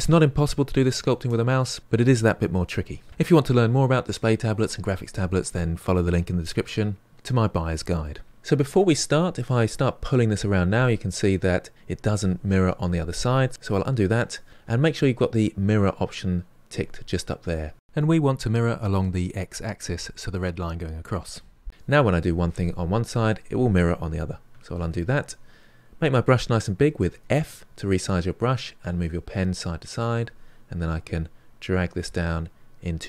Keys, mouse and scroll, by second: 9.7-11.2 drag, 11.2-13.5 middle drag, 13.5 ctrl+z, 16.7 click, 22.2-24.7 drag, 24.7 ctrl+z, 26.7 f, 30.9-33.0 drag.